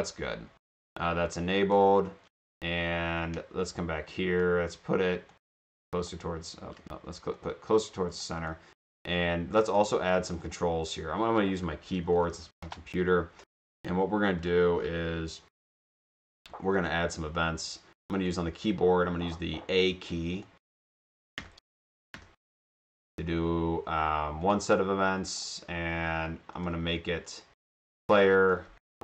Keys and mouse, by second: 1.5 click, 3.8-5.1 middle drag, 5.3 ctrl+click, 6.7 ctrl+z, 7.4 click, 7.8 click, 8.4 click, 9.7 click, 10.4 click, 11.5-13.1 typing, 14.4 click, 16.8 click, 18.0 click, 20.4 click, 20.8 click, 20.9 click, 21.9 click, 22.9 click, 24.5 click, 26.6 click, 27.6 click, 27.8 click, 28.6-29.0 typing.